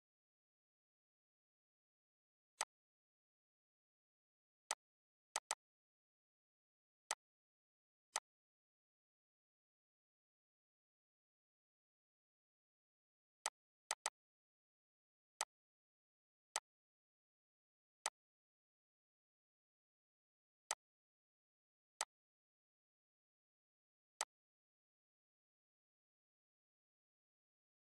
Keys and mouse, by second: 2.2 click, 13.1 click, 20.3 click, 23.9 click.